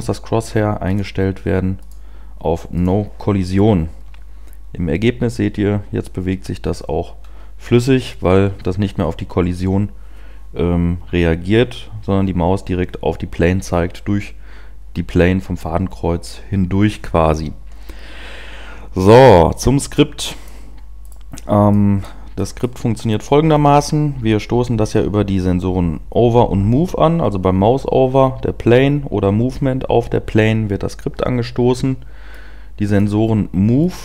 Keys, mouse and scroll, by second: 3.2 click, 19.7 click, 21.2 right click, 23.5 middle click.